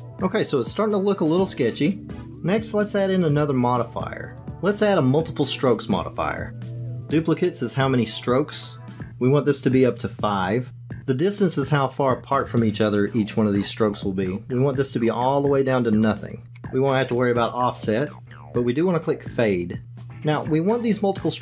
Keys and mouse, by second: 4.5-6.8 drag, 10.1 click, 10.7 click, 15.0-16.5 drag, 19.9-21.4 drag.